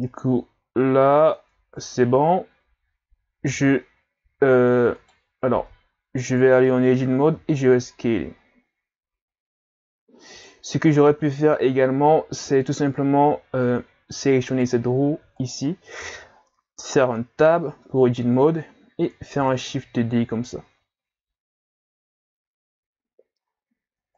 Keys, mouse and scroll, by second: 0.0 click, 3.5 s, 5.6 Tab, 6.8-7.3 scroll up 2, 7.3 s, 11.1 Tab, 13.0 Delete, 14.5 right click, 15.4 shift+right click, 17.5 Tab, 19.6 shift+d.